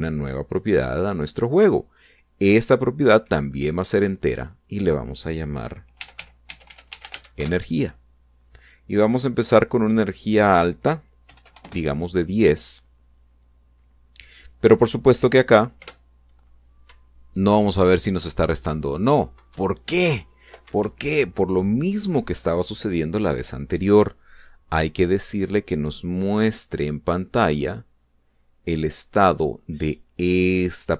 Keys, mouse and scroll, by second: 1.5 click, 3.3 click, 4.5 click, 5.1 click, 6.7-7.9 typing, 8.1 Return, 10.5 click, 12.0 1, 12.2 0, 12.3 Return, 16.5 p, 17.6 Up, 20.3 Down, 21.4 Escape, 26.8 click.